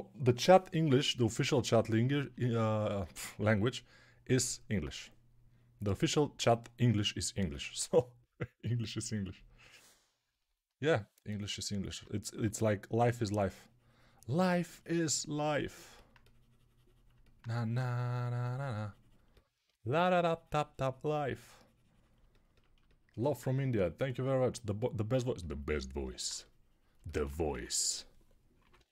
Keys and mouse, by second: 12.2 3, 21.7-26.8 drag, 21.7-26.8 middle drag, 21.7-26.8 right drag, 27.4 1, 28.5 [, 28.6 [, 28.8 [.